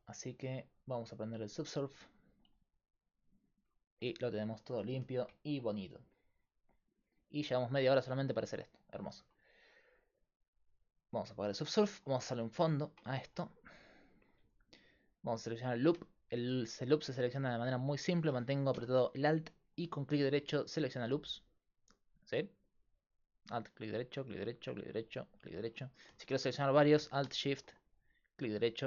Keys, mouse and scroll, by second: 2.4-3.6 drag, 10.2-12.4 drag, 12.4 Tab, 13.7-15.5 right drag.